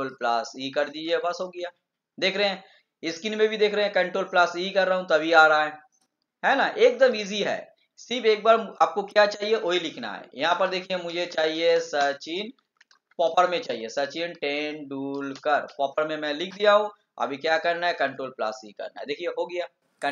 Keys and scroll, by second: 0.9 ctrl+e, 17.8 ctrl+e.